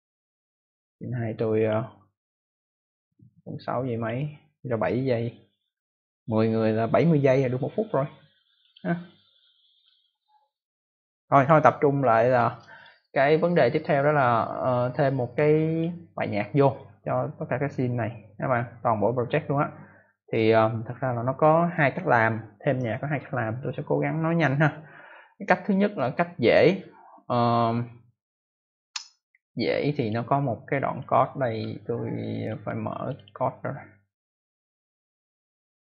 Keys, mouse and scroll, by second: 2.1 click, 8.5 click, 9.8 click, 12.2 click, 15.2 click, 29.9 click, 31.6 middle click, 32.9 click, 33.2 double click.